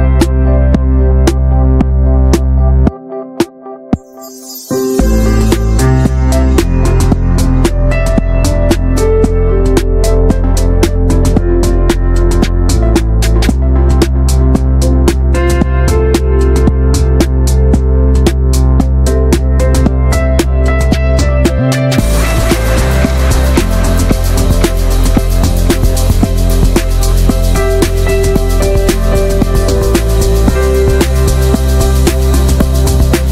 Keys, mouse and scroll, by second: 0.6 ctrl+b, 2.3 scroll down 1, 2.5 scroll up 1, 2.7 Tab, 2.9 shift+middle click, 3.1 alt+z, 3.3 Tab, 3.5 Tab, 3.7 alt+z, 4.0 click, 4.8 scroll up 1, 5.0 click, 5.8 ctrl+z, 6.5 click, 7.3-7.7 scroll up 2, 7.7 shift+middle click, 7.9 click, 8.6 click, 10.6 alt+z, 10.8 Tab, 10.9-11.2 scroll down 6, 11.2 middle click, 11.5 ctrl+s, 11.7 middle click, 11.9 scroll up 1, 12.0 alt+z, 12.3 alt+middle click, 12.6 scroll up 1, 12.8 shift+middle drag, 13.1 3, 13.2-14.4 drag, 14.4 middle click, 14.7 alt+z, 15.0 shift+middle click, 15.2 x, 15.6 scroll down 4, 15.8 middle click, 16.0 Tab, 16.1 drag, 16.4 shift+middle drag, 16.6 ctrl+s, 16.9 drag, 17.2 shift+middle click, 17.4 middle click, 17.6 scroll down 1, 17.9 middle drag, 18.0 ctrl+s, 18.1 click, 18.4 a, 19.2 drag, 19.4-21.4 middle drag, 21.4-21.8 scroll up 2, 21.6 middle click, 21.8 ctrl+s, 22.0-23.0 drag, 23.0 ctrl+h, 24.7-25.0 middle drag, 25.0 shift+scroll down 1, 25.1-25.7 shift+middle drag, 25.7 ctrl+s, 26.8 click, 27.5-28.1 middle drag, 28.1 ctrl+s, 28.2 drag, 28.5 n, 28.6 drag, 28.7 scroll down 1, 28.8-29.3 shift+middle drag, 29.3-29.7 scroll up 2, 29.4 shift+middle click, 29.7 ctrl+s, 29.8 drag, 30.1 Tab, 30.1 scroll up 1, 30.4-31.4 shift+middle drag, 31.4 Tab, 31.5 scroll down 2, 31.6-32.1 middle drag, 32.1 ctrl+s, 32.8-33.3 drag.